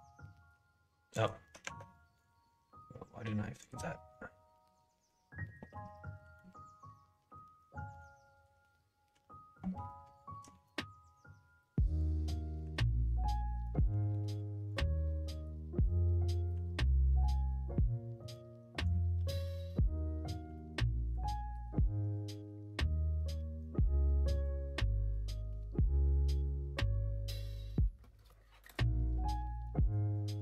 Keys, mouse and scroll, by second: 1.1 click, 1.6 Tab, 5.6 KP_1, 6.1 KP_3, 7.2 KP_1, 9.0 l, 10.4 shift+s, 12.6 ,, 16.5 shift+r, 19.1 shift+d.